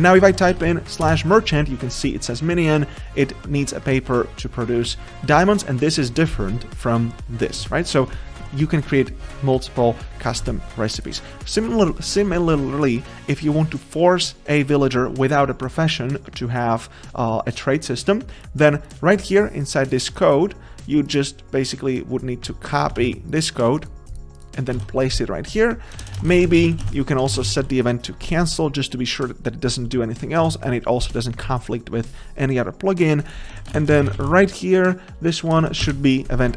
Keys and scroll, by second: 19.0 alt+Return, 23.0 ctrl+c, 24.8 ctrl+v, 26.0 ctrl+v, 27.3 Return, 36.0 Return.